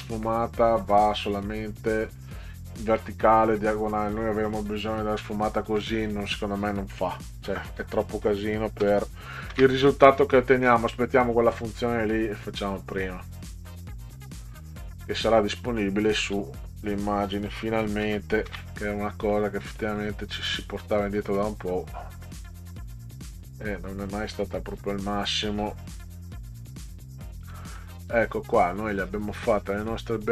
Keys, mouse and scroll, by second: 8.8 ctrl+c, 9.5 ctrl+v, 13.7 click, 14.7 click, 18.0 ctrl+c, 18.5 ctrl+v, 19.3 middle click, 19.9 click, 20.5-22.7 drag, 24.3 click, 26.3 ctrl+c, 26.5 ctrl+v, 27.5 middle click, 28.1-30.3 drag.